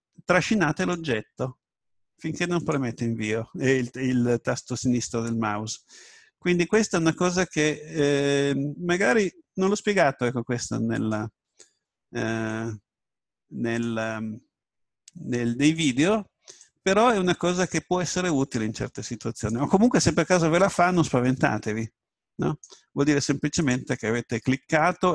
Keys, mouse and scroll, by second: 6.5 right click, 12.5 right click, 16.0-17.7 drag, 16.6 right click, 20.3 right click.